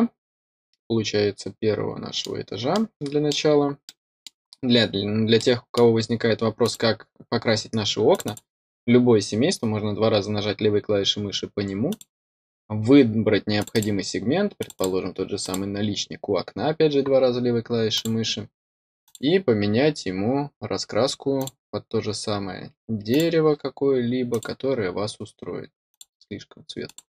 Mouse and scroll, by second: 2.7-3.2 middle drag, 3.8-4.2 middle drag, 4.9-5.3 scroll up 1, 5.3-5.7 middle drag, 6.6 click, 7.2-7.7 scroll up 2, 8.0 click, 8.2 click, 11.8 click, 13.5 click, 13.7 click, 14.5 click, 14.7 click, 15.4 click, 17.9 click, 19.0 click, 21.3 click, 23.0 click, 24.2 click, 25.8 click, 26.8 click.